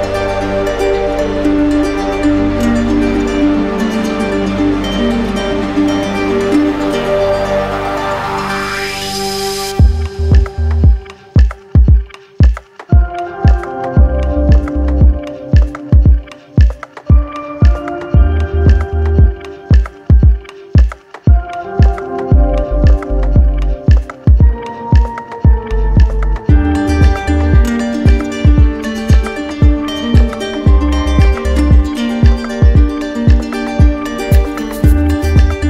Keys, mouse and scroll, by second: 7.4-8.6 middle drag, 8.6-9.6 right drag, 9.6-10.7 drag, 11.6-12.8 drag, 14.1-15.1 drag, 17.6 click, 19.7 click, 24.2 alt+click, 24.5 ctrl+z, 26.8 alt+click, 27.0 ctrl+z, 30.6 alt+click, 32.1 alt+click, 33.9 alt+click, 35.5 shift+click.